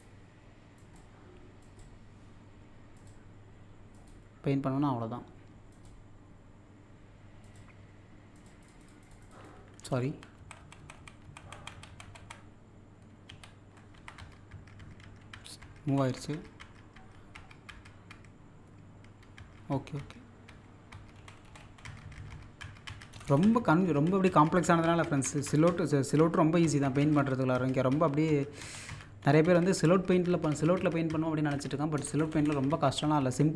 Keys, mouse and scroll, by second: 0.0 typing, 10.1 ctrl+z, 13.3 ctrl+z, 13.3 typing, 15.9 Up, 21.2 Up, 23.1 Right, 23.7 typing, 25.0-27.3 typing, 28.6 Left, 29.2 Left, 29.4-32.0 typing.